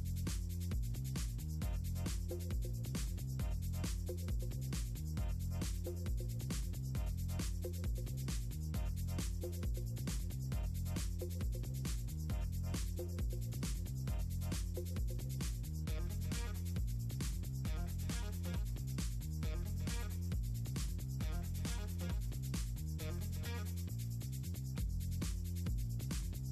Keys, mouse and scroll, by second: 1.1 click, 1.8 click, 3.7 click, 3.9 click, 5.9 click, 6.3 click, 7.1 shift+click, 8.2 shift+click, 9.9 click, 11.6 click, 12.3 click, 12.5 scroll down 2, 12.8 scroll up 2, 13.0 click, 14.1 click, 14.5 click, 15.1 click, 15.4-16.6 ctrl+drag, 16.7 shift+click, 19.1 click, 19.7 shift+click, 20.4 shift+click, 22.1 click, 22.9 click, 23.2 scroll down 2, 26.0-26.3 scroll up 2.